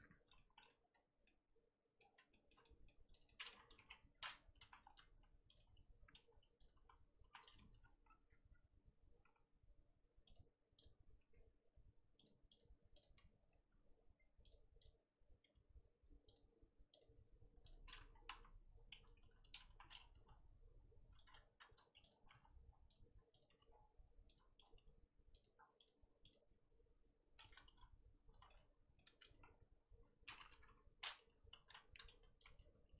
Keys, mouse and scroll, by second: 0.0-0.3 scroll up 1, 0.3 shift+middle click, 0.9-1.2 scroll down 4, 1.2-3.2 middle drag, 3.2 click, 3.2-3.8 middle drag, 3.8 KP_3, 4.1-4.4 scroll up 2, 4.4 Tab, 4.6 z, 5.5 click, 6.0 scroll up 1, 6.6 click, 6.8 z, 7.3 z, 7.5 g, 10.8 click, 11.2 f, 12.6 click, 13.0 click, 13.1 f, 14.8 click, 15.4 f, 17.0 click, 17.1 f, 18.1 scroll down 4, 18.2 KP_1, 18.8 scroll up 1, 19.2 Tab, 19.4 scroll up 2, 19.6 z, 20.2 g, 21.4 Tab, 22.1 click, 22.2 g, 23.4 click, 23.4 g, 24.6 click, 24.7 g, 25.8 click, 26.3 click, 26.5 g, 28.3 z, 28.5-29.0 middle drag, 29.0 Tab, 29.2 click, 29.4-30.0 scroll down 2, 30.0-30.5 scroll up 2, 30.5 KP_3, 31.2 Tab, 31.7 z, 31.7 shift+middle click, 31.9-32.4 scroll up 2, 32.6 click.